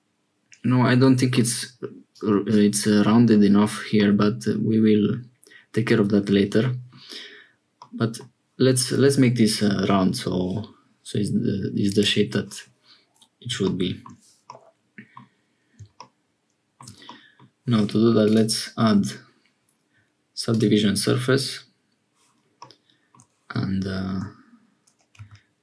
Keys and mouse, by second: 2.0 click, 3.9-6.9 middle drag, 7.7 middle click, 11.8 click, 14.4 middle click, 17.1 middle click, 18.2-20.5 drag, 22.5 middle click, 24.1 Tab, 25.1 a.